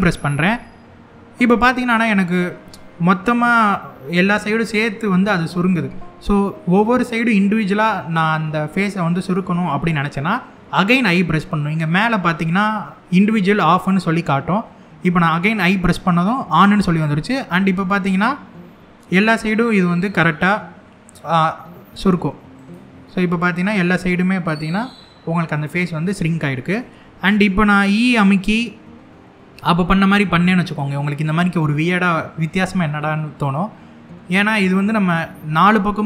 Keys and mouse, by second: 17.7 middle click, 22.3 click, 22.7-26.0 middle drag, 26.5 middle click, 29.2 e.